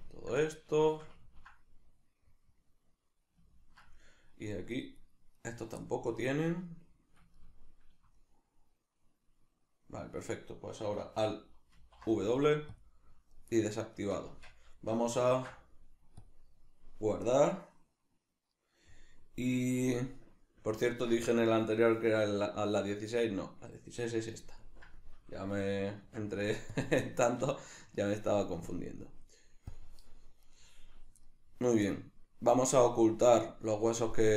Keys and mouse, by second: 4.8 shift+right click, 5.0 shift+right click, 5.4 shift+right drag, 5.9-11.8 middle drag, 11.8 alt+w, 13.4 middle click, 14.3 Tab, 19.7-28.7 middle drag, 26.0 Tab, 28.7-30.5 drag, 30.5 right click, 31.3-34.3 middle drag.